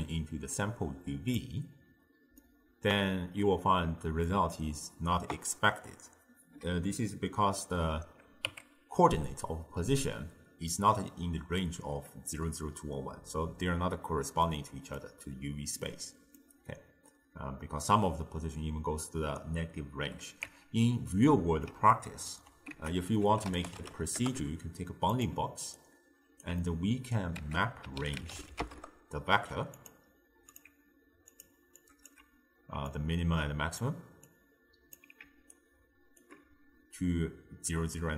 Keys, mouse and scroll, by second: 2.4-5.6 middle drag, 8.5 Tab, 9.2-12.3 middle drag, 14.5-18.9 middle drag, 20.5 Tab, 21.1-22.8 middle drag, 22.8 ctrl+a, 25.8 alt+right click, 26.7 middle click, 27.4 ctrl+a, 30.6-31.9 drag, 32.9 drag, 34.3 drag, 35.6-38.1 alt+right drag.